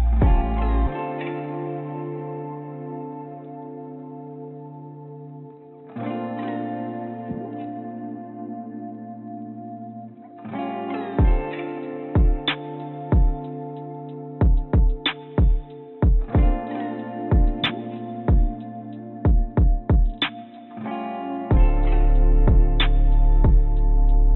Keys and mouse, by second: 10.9 click, 19.1-19.8 drag, 23.8-24.3 drag.